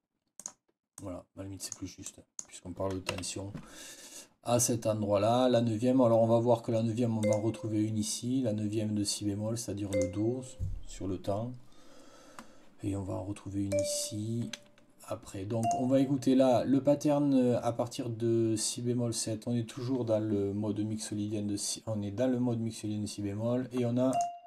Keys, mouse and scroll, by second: 0.3 click, 0.8 click, 2.0 click, 3.0 F8, 7.1 click, 9.8 click, 13.6 click, 15.5 click, 24.0 click.